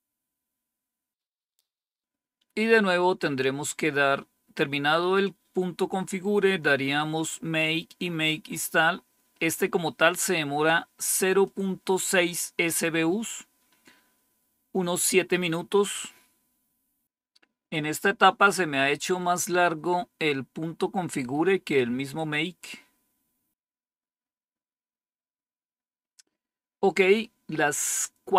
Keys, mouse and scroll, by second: 2.3-3.6 scroll up 1, 3.6-4.1 scroll up 1, 4.1-5.1 scroll down 1, 5.1-6.1 scroll up 1, 6.1-7.9 scroll down 2, 7.9-11.3 scroll up 2, 11.3-13.4 drag.